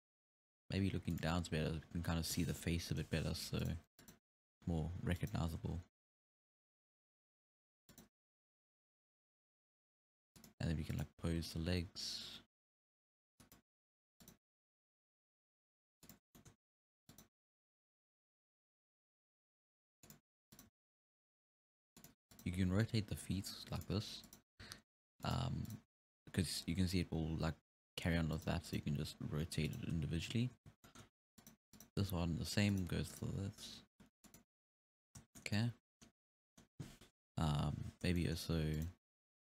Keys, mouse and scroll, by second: 1.7 scroll up 4, 2.6 scroll up 1, 2.9 KP_3, 3.6 right click, 4.0 right click, 4.3 g, 5.6 a, 7.1 alt+g, 7.7 alt+a, 8.0 right click, 8.2 g, 11.0 right click, 11.3 g, 14.3 right click, 14.5 g, 16.4-17.1 shift+middle drag, 17.1 right click, 17.5 g, 20.6 right click, 20.7 g, 22.4-22.8 right drag, 22.8 r, 24.3 right click, 24.6 r, 25.7 right click, 25.9 g, 28.7 right drag, 29.0 r, 30.4-30.9 scroll up 1, 30.9-31.4 shift+middle drag, 31.4-31.9 right drag, 32.1 r, 33.2 right click, 33.4 r, 35.2 scroll down 2, 35.4-36.3 shift+middle drag, 36.3 scroll down 3, 36.4-37.6 middle drag, 37.6-38.2 scroll up 4, 38.2-38.8 middle drag, 38.8-39.1 right drag, 39.1 r.